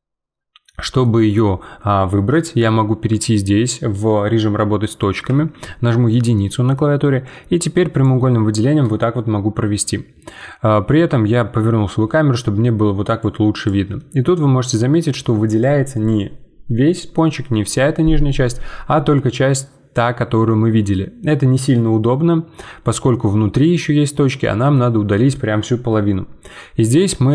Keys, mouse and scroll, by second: 6.3 middle click, 7.2 click, 10.4-13.2 middle drag, 13.2 click, 13.9-17.1 middle drag, 19.2-22.3 middle drag, 24.0-27.0 middle drag.